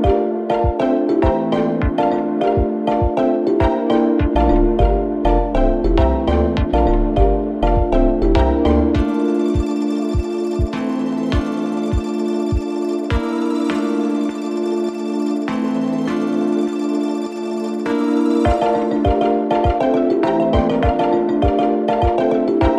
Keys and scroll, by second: 15.6 0, 15.8 Return, 16.8 0, 17.1 Return.